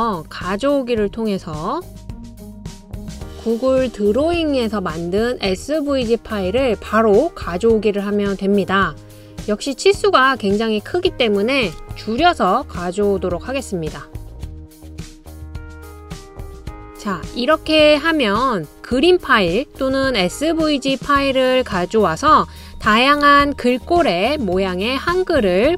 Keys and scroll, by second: 13.4 BackSpace, 25.6 super+c.